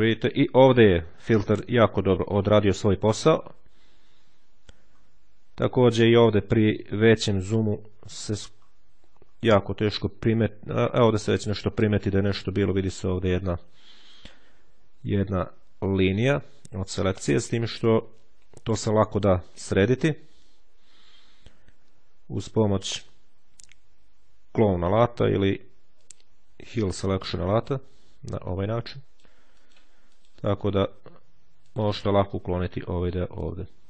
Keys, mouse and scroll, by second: 2.7-3.8 ctrl+scroll up 2, 3.8-4.7 ctrl+scroll up 1, 4.7-5.2 ctrl+scroll up 1, 7.0-7.8 scroll down 2, 7.8-8.2 scroll up 1, 9.8-10.3 shift+scroll down 1, 13.7-14.3 shift+scroll down 2, 16.4-16.9 shift+scroll up 2, 25.4-26.5 drag, 27.4 ctrl+click, 28.3-29.6 drag, 30.0 click, 30.5 click, 31.6 click, 33.1 click.